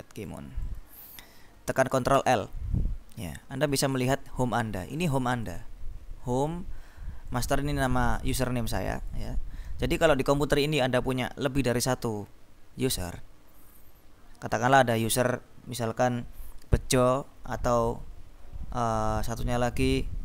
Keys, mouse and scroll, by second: 2.3 ctrl+l, 3.8 click, 5.0-6.1 drag, 6.5 click, 7.3 click, 8.9 click.